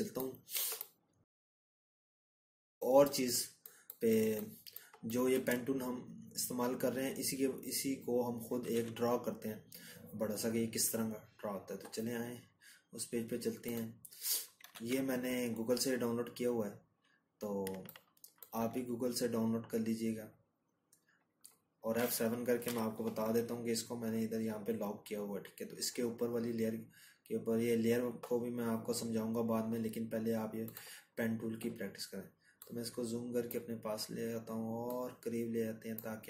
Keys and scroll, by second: 5.5 ctrl+-, 11.5 ctrl+-, 15.1-36.2 ctrl+-, 19.5 F7.